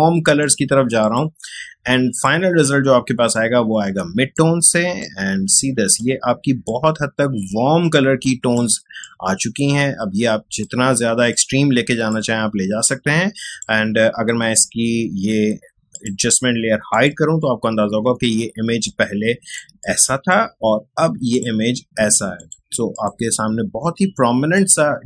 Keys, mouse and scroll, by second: 18.5 space, 18.8-21.5 ctrl+drag.